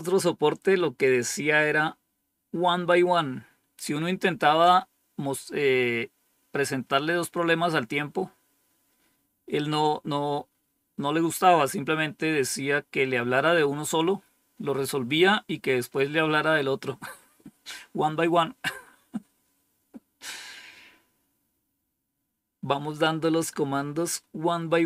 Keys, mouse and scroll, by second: 7.5 scroll down 1.